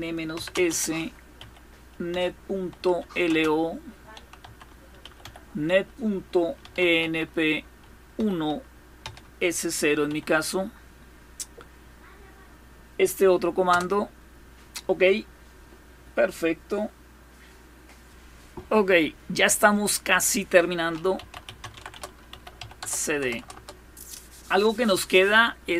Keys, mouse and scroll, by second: 0.0-8.7 typing, 9.8 typing, 13.4 Return, 16.4-17.7 scroll down 1, 17.7 scroll down 1, 20.5-22.4 typing, 22.8 Return, 23.0 Return, 23.1 Return.